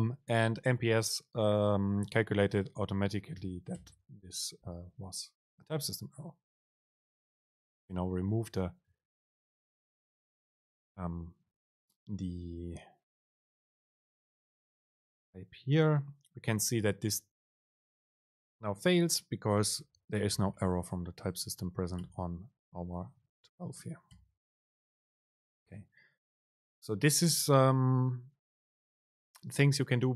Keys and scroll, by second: 3.6 BackSpace, 9.4 super+r, 22.1 BackSpace, 22.9 Escape, 23.3 super+Left, 24.2 BackSpace.